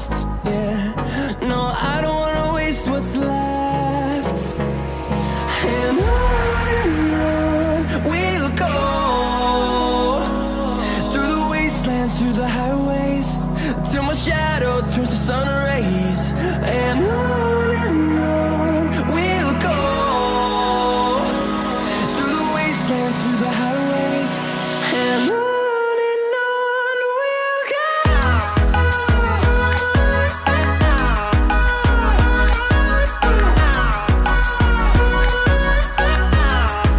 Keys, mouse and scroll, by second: 3.5 click, 9.6 click, 9.9 click, 24.1-33.9 drag, 33.9 Right.